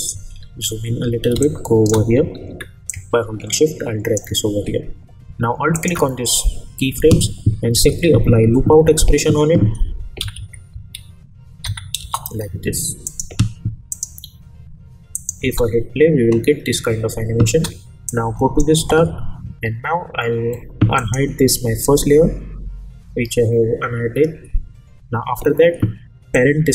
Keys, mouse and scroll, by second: 0.4-0.7 alt+scroll down 1, 1.3 space, 1.4-2.0 click, 1.8 space, 2.3-2.6 alt+scroll up 1, 2.9-4.4 drag, 7.5-8.8 typing, 10.2 Down, 12.0 Return, 13.0 click, 15.4 space, 17.5 space, 18.1-18.7 drag, 20.9 click, 26.6-26.7 drag.